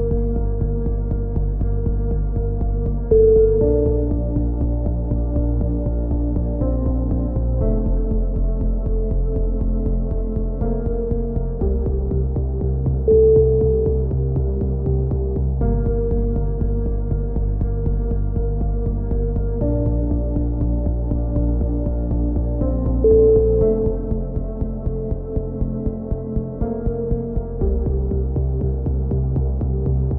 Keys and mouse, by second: 1.4 right click, 2.0-3.4 drag, 3.1 right click, 3.3 z, 3.5 click, 3.9 middle click, 4.1-5.6 drag, 5.6 middle click, 5.6 z, 5.6-6.8 drag, 6.8 right click, 7.0-8.5 drag, 7.3 right click, 7.4 a, 8.0 right click, 8.5 right click, 8.9 click, 8.9 s, 9.8 ctrl+z, 10.0-11.0 drag, 10.6 s, 11.3-12.5 drag, 12.1 a, 12.3 z, 12.5 z, 12.8 click, 16.4 KP_7, 16.8 z, 21.9 z, 22.4 z, 23.0 z, 23.5-26.3 middle drag, 24.7 z, 27.6-29.6 middle drag, 28.8 z, 29.6-30.1 right drag.